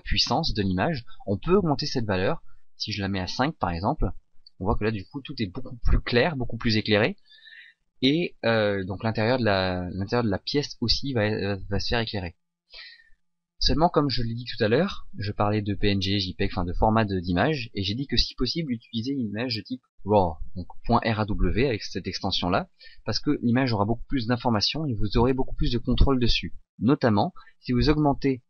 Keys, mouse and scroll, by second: 5.0 click.